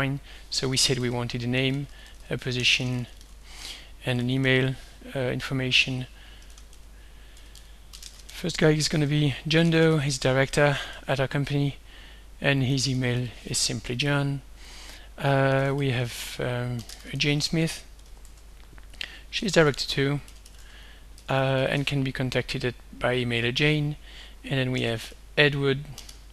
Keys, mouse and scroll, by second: 0.3-5.0 typing, 3.3 Tab, 5.5 click, 6.7-11.4 typing, 9.0 Tab, 12.5-13.7 typing, 14.1 click, 15.4-22.3 typing, 22.6 click, 24.6-26.3 typing.